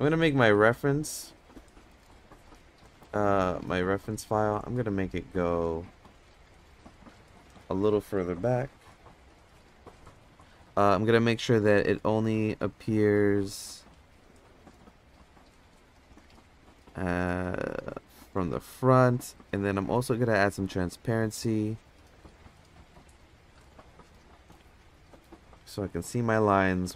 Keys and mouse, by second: 0.2 middle click, 1.2 shift+middle click, 2.6 click, 2.9 Tab, 3.1 click, 3.6 Tab, 4.1 click, 6.5 click, 6.7-7.0 drag, 8.4 g, 14.8 click, 15.5 click, 16.1 click, 19.9 click, 20.9 click, 22.0 click, 22.8-24.5 drag, 25.5 KP_0, 26.6-26.9 middle drag.